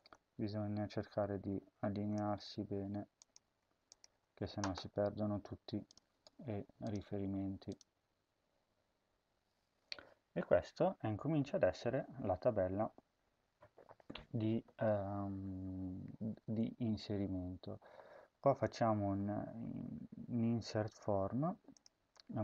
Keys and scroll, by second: 2.1 Tab, 3.3 Tab, 4.1 ctrl+s.